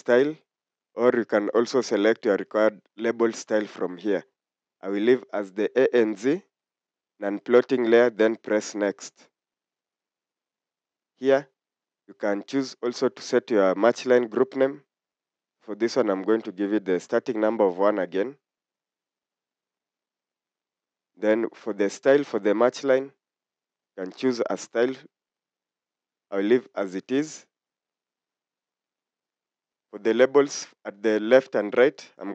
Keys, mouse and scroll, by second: 8.8 click, 17.0 typing.